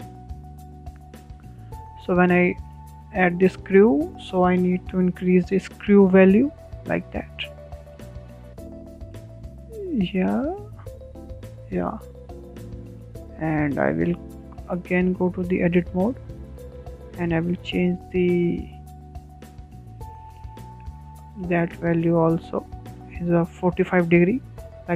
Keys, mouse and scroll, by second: 0.3-3.3 drag, 3.5-7.6 shift+middle drag, 7.6-9.3 drag, 9.3-9.7 scroll down 4, 9.7-10.0 shift+middle drag, 10.0 scroll down 2, 10.3-12.2 middle drag, 12.2 click, 13.7-15.1 middle drag, 15.1 scroll up 4, 15.5-17.8 shift+middle drag, 17.6 Tab, 17.8 Tab, 18.3-20.3 shift+middle drag, 20.3-21.7 drag, 22.8 ctrl+z, 22.9 ctrl+z, 23.1-23.8 middle drag, 23.8 click.